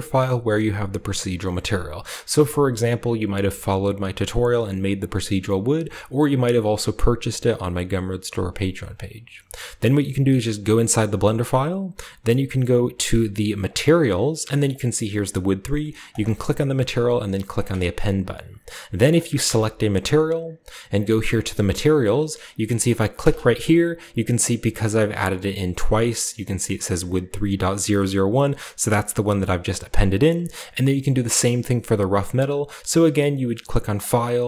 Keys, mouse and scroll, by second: 10.5 click, 10.7 click, 13.6 click, 13.7 click, 16.0 click, 17.5 click, 19.4 right click, 19.9-21.2 right drag, 23.1 click, 32.2-33.7 drag, 33.9 click.